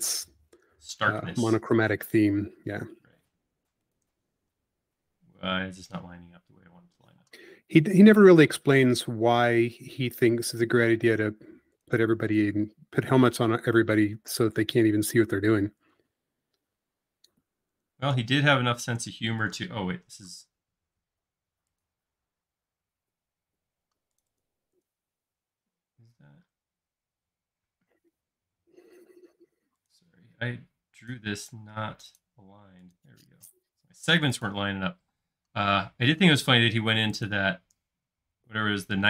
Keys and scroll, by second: 4.6 space, 7.1 m, 13.8-14.8 typing, 19.5 shift+space, 25.7 q, 28.7 shift+q, 32.7 space, 35.1 m.